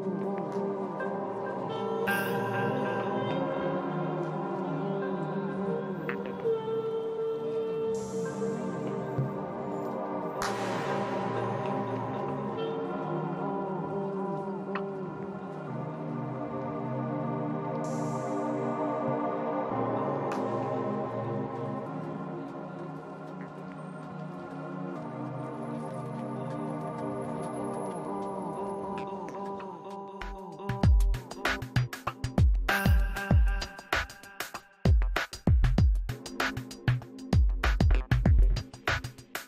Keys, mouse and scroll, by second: 1.0 middle click, 2.0-5.5 middle drag, 4.4 f, 5.2 ,, 10.1-11.4 middle drag, 10.2 f, 11.1 i, 11.4 f, 11.8-13.5 drag, 14.2 click, 15.0 middle click, 15.4 i, 15.6 f, 15.9-22.5 drag, 16.2 middle click, 16.6 f, 21.6 f, 22.3 g, 22.5 f, 22.5 middle click, 22.7 click, 23.4 middle click, 23.5 f, 24.0-25.3 drag, 25.3 middle click, 25.3 click, 25.8 f, 26.1 middle click, 26.5-27.6 drag, 27.6 f, 27.8-29.8 drag, 28.2 f, 28.8 f, 29.3 middle click, 29.8 f, 30.0-31.9 drag, 30.7-32.5 middle drag, 30.9 f, 32.1 i, 32.4 f, 32.6-34.3 drag, 33.1 middle click, 34.3 middle click, 34.7 click, 35.5 middle click, 35.5-37.7 typing, 36.5-39.4 drag.